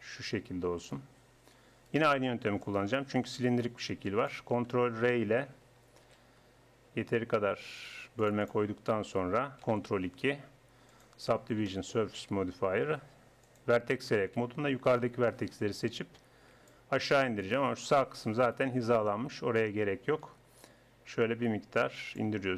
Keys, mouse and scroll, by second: 1.9 right click, 2.7-4.3 middle drag, 4.3 click, 6.1 ctrl+r, 9.6 ctrl+2, 10.9-12.5 middle drag, 13.5 click, 14.0 a, 17.9-20.6 right drag.